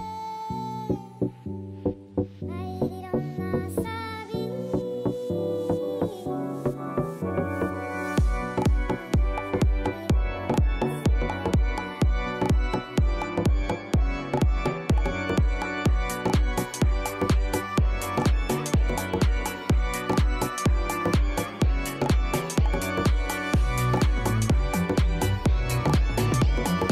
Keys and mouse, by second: 0.4 click, 0.9 click, 1.4 click, 2.5 click, 2.8 click, 3.9 click, 10.2 click.